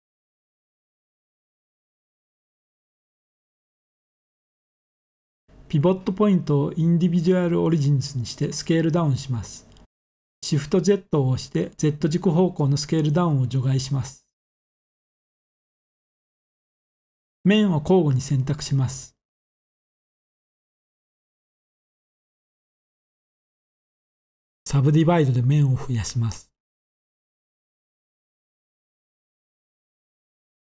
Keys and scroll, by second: 8.5 s, 9.2 z, 29.9 z.